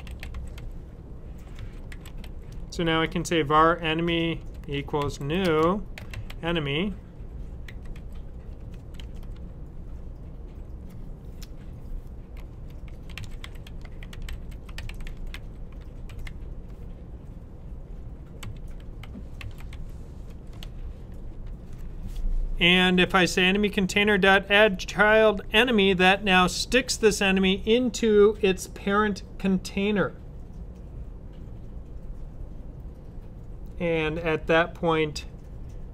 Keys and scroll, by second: 0.0-2.6 typing, 4.0-9.2 typing, 12.7-16.7 typing, 18.3-21.2 typing.